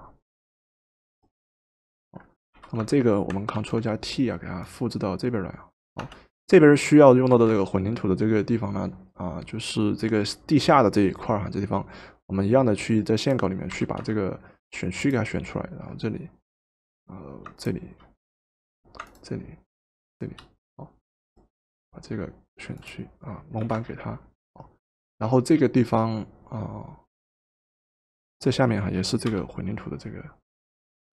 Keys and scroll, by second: 2.6 v, 3.7 ctrl+t, 6.0 Return, 7.3 v, 13.8 w, 23.7 v, 29.3 m.